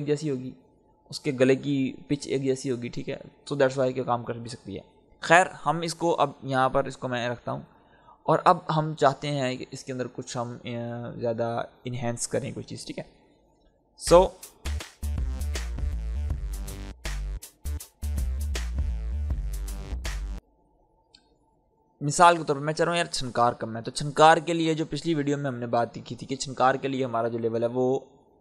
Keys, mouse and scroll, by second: 4.3-8.2 drag, 8.2-10.0 scroll down 1, 14.0 space, 14.8-17.0 scroll down 1, 17.6-19.6 drag, 19.6-20.3 scroll up 1, 20.3 space.